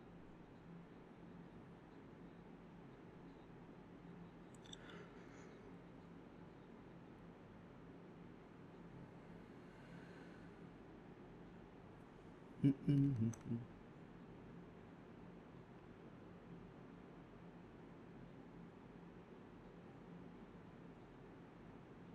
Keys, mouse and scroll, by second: 0.0 alt+click, 0.5 typing, 2.3 scroll down 1, 2.5 middle click, 2.6 scroll up 1, 3.0 middle click, 3.9-4.2 scroll down 1, 4.2-4.8 scroll up 2, 4.4 middle click, 4.8 middle click, 6.5 scroll up 1, 6.7 middle click, 7.8 alt+click, 8.0 alt+click, 8.1 alt+click, 8.3 alt+click, 8.5 alt+click, 8.6 alt+double click, 8.9 alt+double click, 9.2 ctrl+b, 9.7 typing, 11.1-11.8 typing, 12.1 double click, 12.9 typing, 13.2 double click, 15.0 shift+click, 15.5 alt+click, 16.8 shift+click, 17.9 double click, 19.9 double click, 19.9 shift+click, 21.0 alt+click, 21.2 alt+click, 21.5 alt+click, 21.8 shift+click.